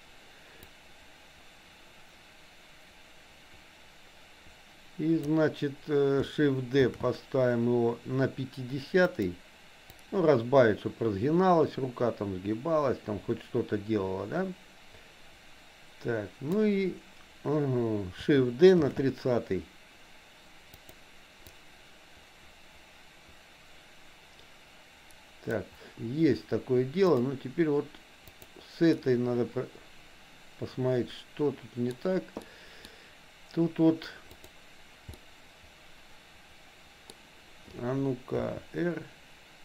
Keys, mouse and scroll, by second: 0.7-5.3 drag, 6.8 shift+d, 10.1-16.7 drag, 18.9 shift+d, 21.6-25.7 drag, 28.3 click, 28.9-31.9 middle drag, 32.4 middle click, 34.3 click, 35.3-37.6 middle drag, 38.9 r.